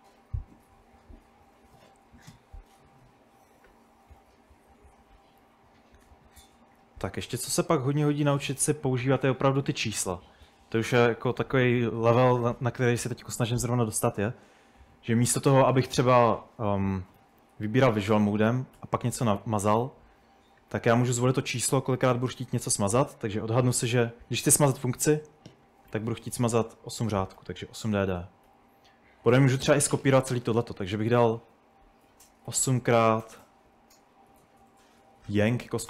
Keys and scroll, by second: 5.0-9.1 typing, 17.0-19.4 typing, 25.9 typing, 27.2 typing, 28.5 typing, 32.5-35.8 typing.